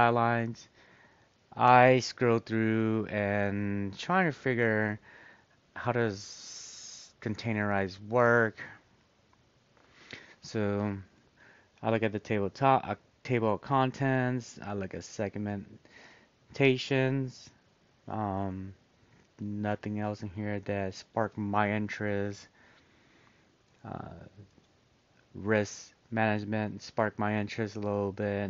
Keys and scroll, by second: 2.5 scroll, 6.8-8.1 scroll.